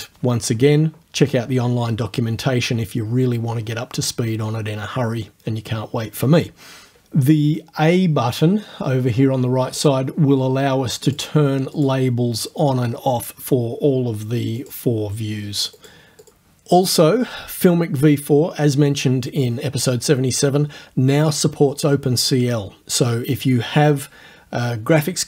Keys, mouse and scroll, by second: 9.8 click, 11.1 click, 11.8 click, 14.6 click, 15.8 click, 16.2 click.